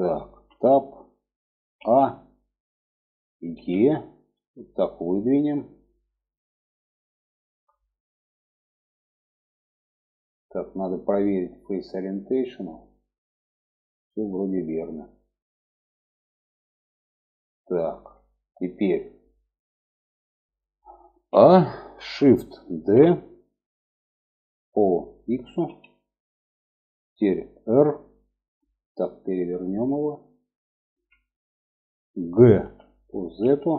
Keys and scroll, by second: 1.1 a, 2.9 e, 20.6 a, 22.1 shift+d, 27.0 r, 31.9 g.